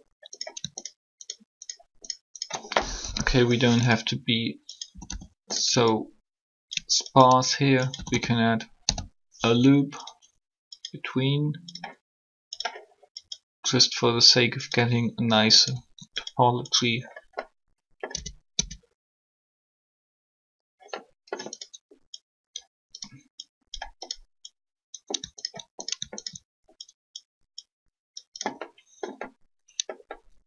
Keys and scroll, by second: 2.9 shift+3, 4.9 a, 6.2 typing, 7.8 ctrl+a, 8.0-8.8 typing, 18.1 Tab, 18.5 Tab.